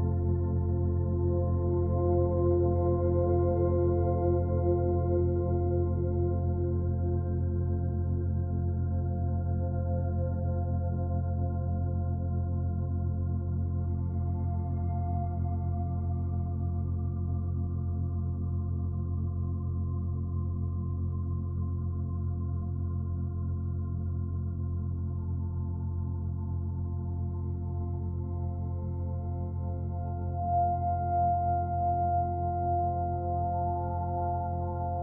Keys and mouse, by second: 6.5-14.3 ctrl+alt+drag, 14.6-15.5 drag, 15.6 ctrl+s, 17.3 click, 18.4-20.7 drag, 20.5 1, 20.9-21.3 ctrl+alt+drag, 21.5 alt+shift+drag, 21.9 ctrl+alt+shift+click, 22.2-23.1 drag, 25.1-26.0 drag, 26.7 click, 28.5 shift+d, 29.4 Return, 30.4 click, 31.5-32.3 drag, 32.3-32.9 typing, 33.1 Return.